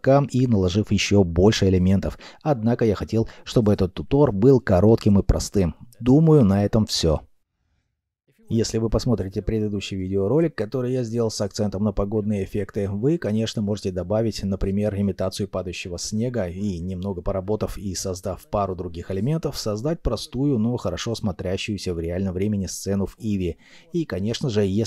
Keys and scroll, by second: 9.8 6, 9.9 Return.